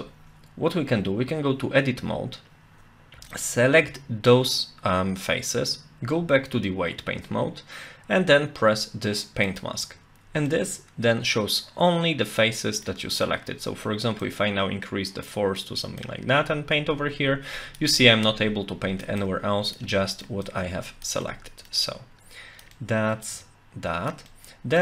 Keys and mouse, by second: 3.3 alt+click, 6.0 Tab, 9.5 click, 10.5-12.9 middle drag, 14.2-15.6 drag, 16.0-17.8 drag, 18.0-19.0 drag, 19.2 click, 19.9 middle click, 20.5 click, 21.2 middle click, 21.9 click, 22.7 middle click, 23.3 click, 24.3 middle click.